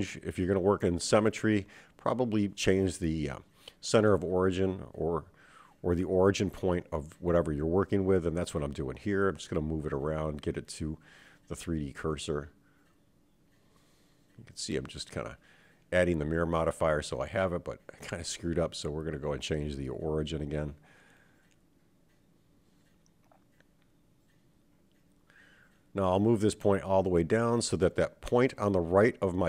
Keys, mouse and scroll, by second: 0.5 click, 2.4 click, 3.7 click, 6.9-8.5 drag, 11.6-13.2 drag, 15.4 Tab, 17.7 click, 19.6-20.9 drag, 22.2 click, 23.7 Tab, 24.2 Tab, 26.1-28.4 drag.